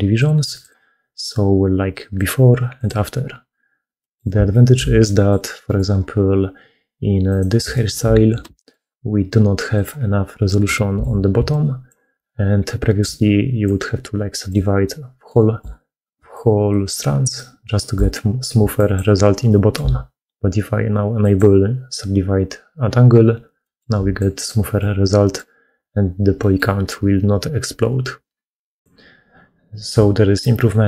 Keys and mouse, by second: 3.8 middle click, 4.4 shift+click, 4.9 middle click, 5.6 click, 7.6 shift+middle click, 8.4 alt+a, 8.4 click, 10.3 middle click, 10.6 shift+middle click, 11.2-15.6 d, 12.5 click, 15.2 click, 16.0-17.8 d, 17.2 click, 17.2 right click, 18.4-19.6 d, 19.4 click, 23.5 click, 23.5 right click, 23.8-25.6 d, 24.6 click, 24.6 right click, 26.2 click, 26.2 middle click, 26.2 right click.